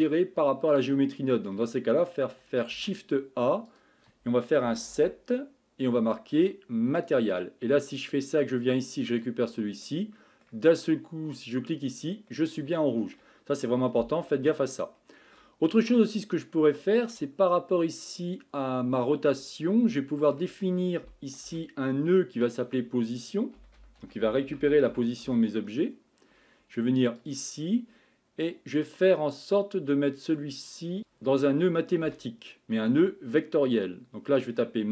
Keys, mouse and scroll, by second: 0.0 click, 9.2-9.9 drag, 9.9-11.7 middle drag, 11.7 click, 12.3-25.2 middle drag.